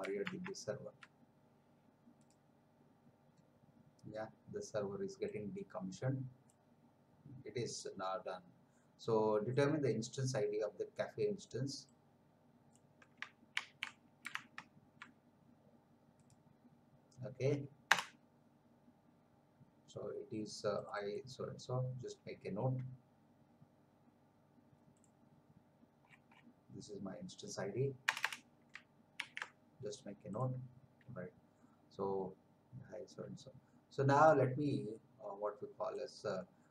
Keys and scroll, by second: 0.4 alt+Tab, 13.5 ctrl+c, 14.5 alt+Tab, 17.9 Return, 28.1 Return, 29.2 ctrl+v.